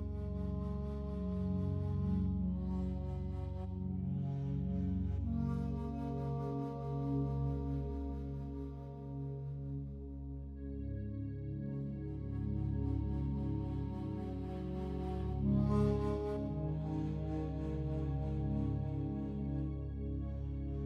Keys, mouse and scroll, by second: 0.3 ctrl+alt+click, 0.7 ctrl+alt+click, 1.5 alt+shift+click, 2.0 alt+shift+click, 3.6 click, 4.9 click, 5.9 click, 7.7 Escape, 8.5-9.6 alt+drag, 10.4 a, 11.6 1, 12.1 u, 12.7 click, 14.4 a, 16.1-17.1 typing, 17.6 click, 20.1 click.